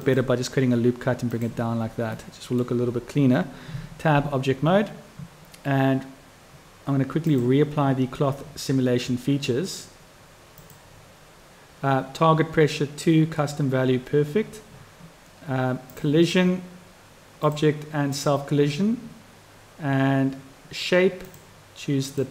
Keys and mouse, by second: 2.1 click, 3.8 Tab, 15.9 click, 17.4 click, 18.0 click, 21.3-22.3 drag.